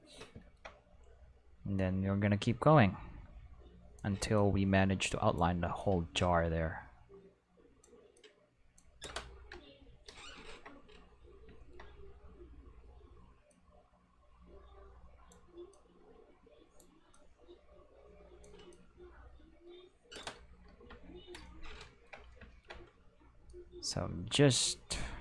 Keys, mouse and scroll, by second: 1.8-4.0 drag, 4.4-5.4 drag, 5.8-7.8 drag, 8.2 click, 9.5 Return, 13.5-15.3 drag, 15.7-16.8 drag, 17.1-18.4 drag, 18.7-20.2 drag, 20.7 Return, 23.5-25.2 drag.